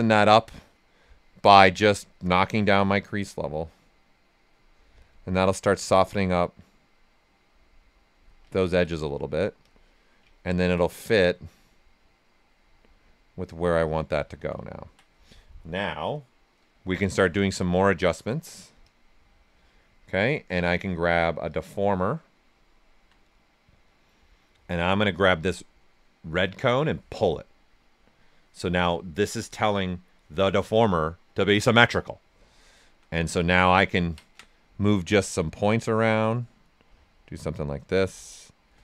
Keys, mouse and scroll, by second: 1.4-4.8 drag, 4.8 right click, 6.3-7.6 drag, 7.6 click, 8.5 ctrl+right click, 9.6 click, 10.3 ctrl+right click, 11.9 click, 13.1 right click, 14.1 typing, 14.6 alt+right click, 17.3 w, 17.8 alt+right click, 18.8 click, 20.1 alt+click, 20.6 click, 22.6 alt+right click, 23.1-26.6 right drag, 26.6-30.6 drag, 32.4 click, 32.5 alt+right click, 33.1 ctrl+right click, 33.7 ctrl+click, 35.2-36.6 drag, 36.6-38.8 right drag.